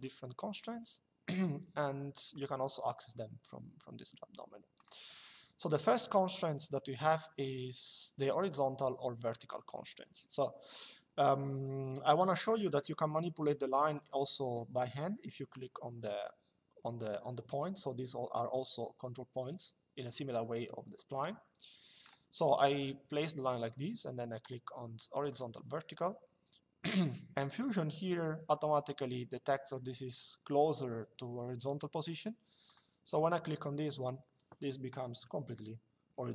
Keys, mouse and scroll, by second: 2.0 click, 4.5 click, 9.0 click, 13.1 click, 22.3 click, 24.9 click, 32.4 click, 35.8 Escape.